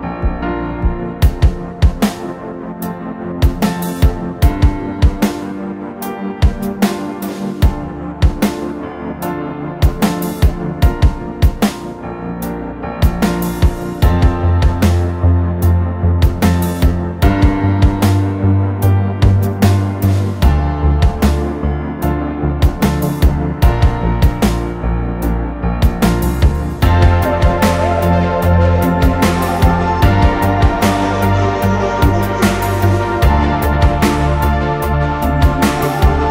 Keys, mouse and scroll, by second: 0.5 Return, 1.2 scroll down 1, 1.4 middle click, 5.5 middle click, 5.9 scroll up 1, 6.1 middle click, 6.4-7.5 scroll up 1, 7.5 middle click, 7.9-8.9 typing, 8.3 scroll down 1, 8.4 middle click, 9.9 Return, 10.3 scroll down 1, 10.6-11.1 scroll up 1, 11.8 typing, 12.2 Return, 12.7 middle click, 15.8 Escape, 19.6 space, 20.6 Delete, 23.5 double click, 23.8 right click, 24.8 middle click, 25.2-25.7 scroll down 2, 25.3 middle click, 25.7 scroll up 1, 26.1 middle click, 26.8 scroll down 1, 27.0 middle click, 27.5 scroll up 1, 28.0 r, 33.4 scroll up 1, 33.6 middle click.